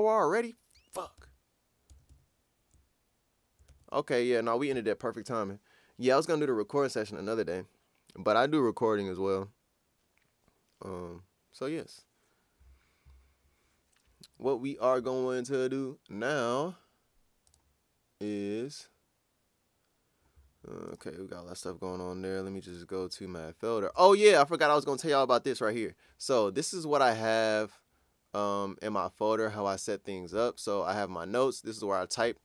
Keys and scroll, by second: 1.2 super+`, 1.9 super+`, 2.1 super+Tab, 3.7 super+Tab.